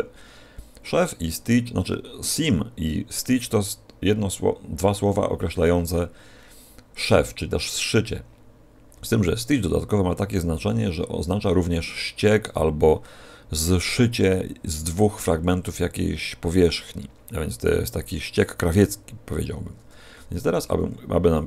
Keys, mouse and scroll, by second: 20.1 a.